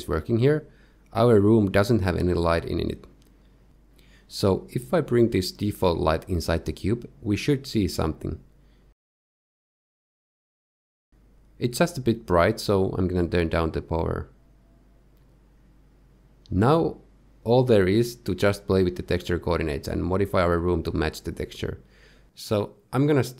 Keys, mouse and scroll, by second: 0.2 middle click, 3.1 middle click, 4.1-4.4 scroll down 1, 5.7 shift+middle click, 6.1 click, 8.1 shift+s, 10.5-11.0 scroll up 1, 11.0 g, 13.0 click, 14.0 click, 14.3 click, 17.1 shift+middle click, 17.2 middle click, 18.7 middle click, 19.6 middle click, 20.3 middle click, 20.5 click, 20.5 scroll up 2, 20.7 middle click, 22.6 click.